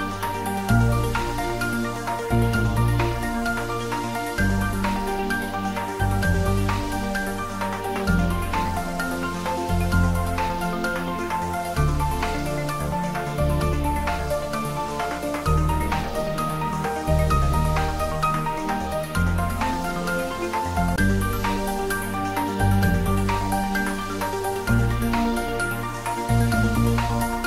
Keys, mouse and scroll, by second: 1.1-4.2 middle drag, 5.2-5.7 scroll up 1, 5.7-7.6 middle drag, 8.6 shift+click, 14.2 click, 18.2 Tab, 18.8 click.